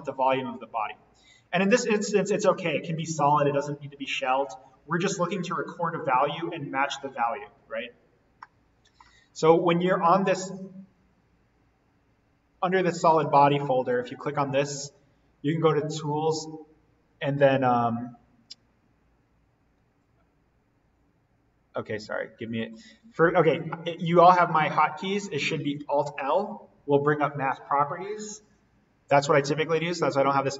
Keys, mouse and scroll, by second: 0.2 click, 1.3 scroll down 1, 1.7-4.1 middle drag, 4.1-6.1 scroll up 1, 8.3-11.3 middle drag, 15.4 click, 22.5 click, 26.0 alt+l.